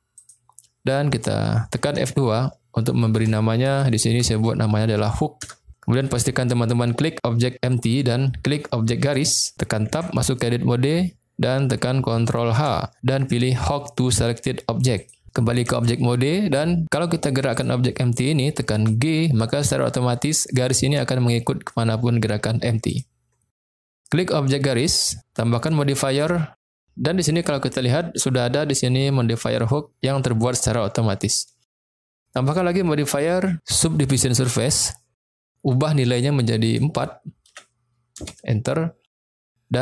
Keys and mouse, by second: 0.2 click, 1.8 F2, 3.8 o, 7.7 click, 9.1 shift+click, 9.9 Tab, 12.5 ctrl+h, 15.6 Tab, 16.9 click, 17.4 click, 18.7 g, 22.9 right click, 24.6 click, 26.1 click, 31.9 click, 32.4-34.6 drag, 36.4-39.1 drag.